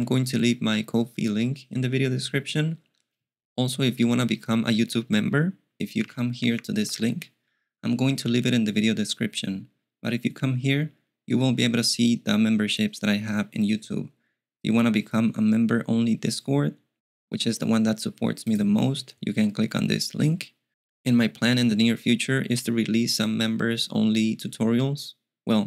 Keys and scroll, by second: 6.0 super+t, 6.5 super+v, 6.8 Return.